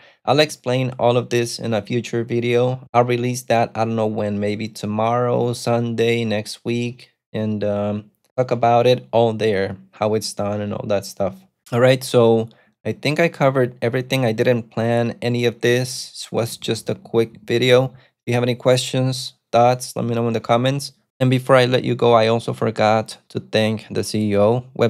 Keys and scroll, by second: 16.5-18.4 typing.